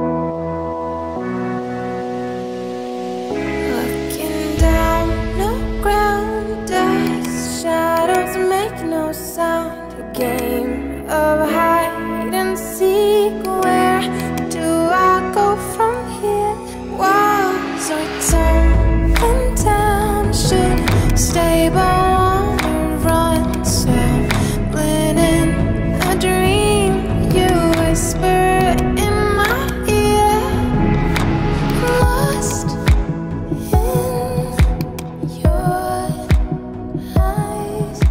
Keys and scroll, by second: 7.2 [, 21.3-22.2 typing, 23.9-25.7 typing, 36.7 [, 37.4 p, 38.0 [.